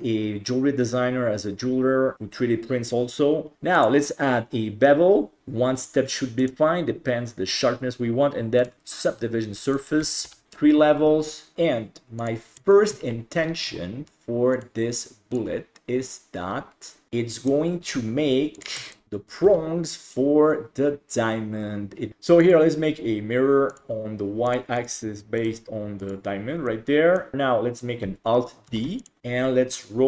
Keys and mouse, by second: 3.5 click, 6.6-8.7 drag, 9.9 click, 11.3 middle drag, 11.5 ctrl+s, 12.7 shift+middle drag, 13.7 s, 15.4-17.1 drag, 17.1-17.5 middle drag, 18.6 click, 19.5 g, 22.5-23.8 drag, 24.5 click, 24.8 click, 25.4 click, 26.7-27.2 middle drag, 28.7 alt+d.